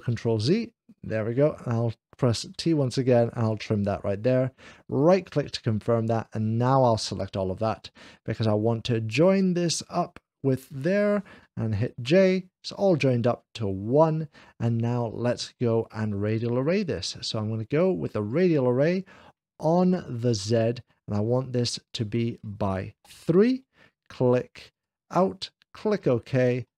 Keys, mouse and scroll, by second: 0.2 ctrl+z, 3.3 click, 3.6 ctrl+z, 4.7 right click, 5.7 middle click, 6.1 click, 11.8 j, 14.5-15.6 middle drag, 18.2 click, 19.2 middle click, 20.2 click, 21.7 click, 22.8 3, 23.0 j, 24.6 click, 25.9 click.